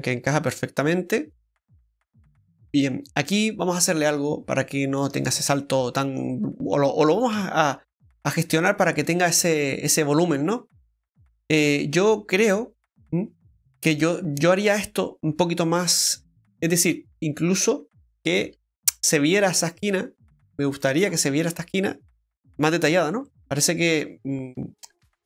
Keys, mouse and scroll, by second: 3.9 Tab, 4.1 scroll up 2, 4.7 middle click, 4.7-5.1 scroll up 1, 5.1 shift+middle click, 5.7 middle click, 7.7 scroll up 1, 8.6 Tab, 9.0 right click, 9.5 Tab, 9.8 right click, 10.1 Tab, 10.8 middle click, 12.4 middle click, 16.1 ctrl+r, 21.0 ctrl+r, 21.0-21.6 scroll down 4, 21.5 middle click, 22.8 middle click, 22.8 Tab, 23.2 middle click.